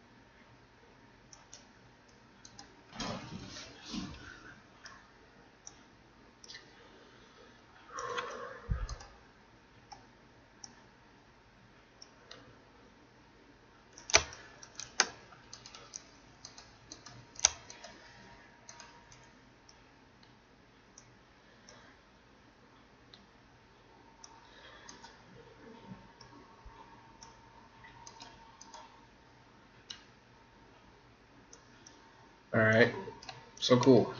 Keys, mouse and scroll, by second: 2.4 right click, 4.8-8.2 drag, 8.8 right click, 9.9 click, 10.8-13.8 drag, 14.3 middle click, 15.4 middle click, 15.4-20.3 right drag, 19.7 click, 20.5 click, 21.8-23.4 drag, 24.8 right click, 26.2-27.9 drag, 28.1-29.9 right drag, 30.5 click, 32.0-34.1 middle drag, 33.9 Tab.